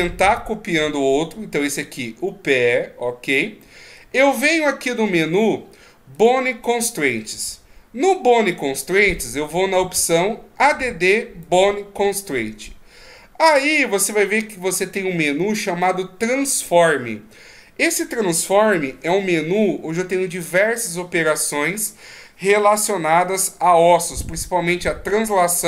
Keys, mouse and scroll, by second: 3.6 middle click, 6.1 click, 11.4 click.